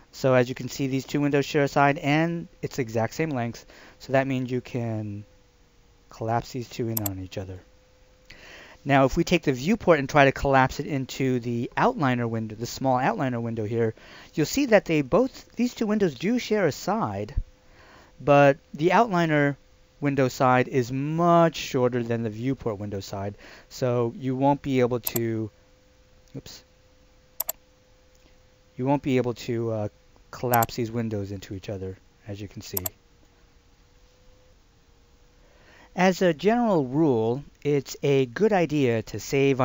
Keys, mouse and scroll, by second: 7.0 click, 25.1 click, 27.6 click, 34.5 F2.